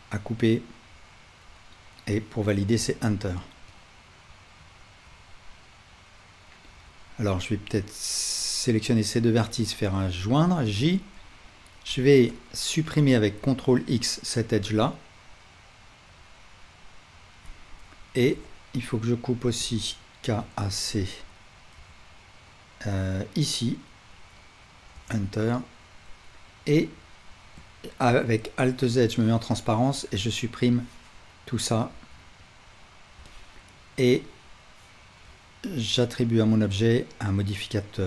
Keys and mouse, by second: 5.1-7.6 middle drag, 6.7 1, 7.6-12.3 shift+right drag, 8.4 shift+click, 11.9 2, 12.3 middle click, 12.4-14.6 right drag, 13.4 ctrl+x, 14.6-16.4 alt+middle drag, 19.6-27.5 middle drag, 19.6 k, 28.1 alt+z, 31.9 x, 34.9-38.0 alt+middle drag.